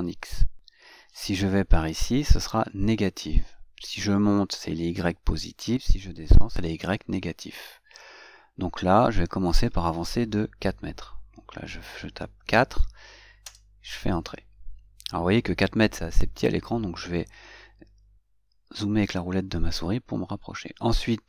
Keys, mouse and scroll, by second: 17.1 scroll up 2, 18.0 scroll up 2.